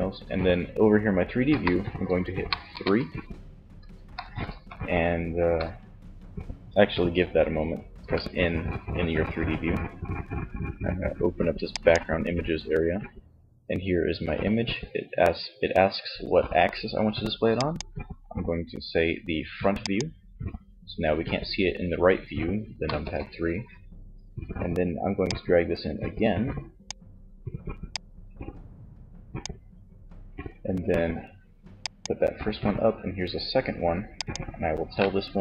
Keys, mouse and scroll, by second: 1.7 KP_3, 7.0 n, 10.8-12.5 drag, 16.5-19.1 drag, 22.1 KP_3, 25.2-26.7 drag, 31.0-32.6 drag, 33.1-35.2 drag.